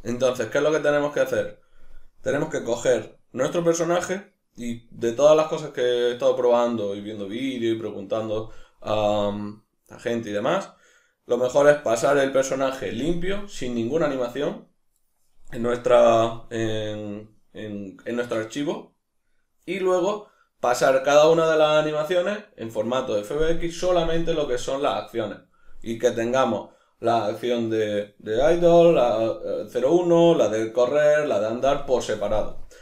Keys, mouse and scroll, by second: 15.5 click, 18.3 Escape.